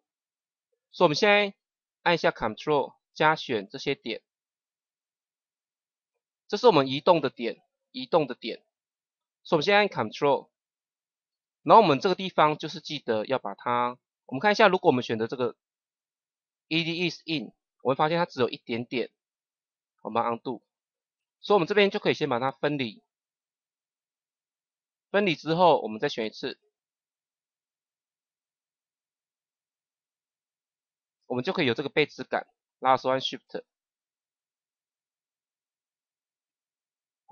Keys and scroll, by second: 20.6 ctrl+z.